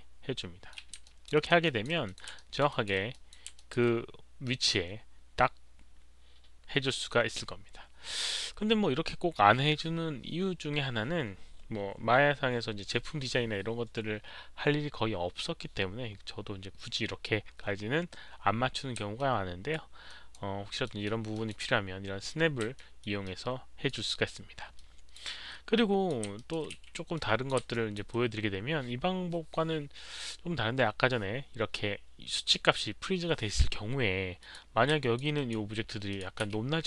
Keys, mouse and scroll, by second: 1.0 alt+click, 1.3 alt+right drag, 1.6 alt+click, 2.0 click, 2.3 alt+right drag, 2.6 alt+middle click, 2.6 v, 2.6 alt+drag, 2.8 alt+middle click, 2.8 v, 3.1 alt+click, 3.5 alt+click, 8.2 alt+click, 8.2 alt+right click, 8.2 middle click, 8.2 v, 9.3 alt+click, 9.3 alt+right click, 12.4 alt+click, 19.1 alt+click, 20.0 alt+right drag, 20.3 alt+click, 20.8-21.3 alt+middle drag, 20.8 alt+right click, 21.3 alt+click, 22.7 middle drag, 23.0 alt+right click, 23.2 alt+click, 24.7 alt+click, 25.7 alt+click, 26.3 alt+right drag, 26.3 alt+middle click, 27.1-27.4 alt+drag, 27.1 alt+right click, 27.1 alt+middle click, 27.1 w, 27.7 alt+click, 34.4 alt+click, 35.0 alt+click, 35.3 drag, 35.5 alt+right click, 35.5 w, 36.1 click, 36.1 alt+right click, 36.1 w.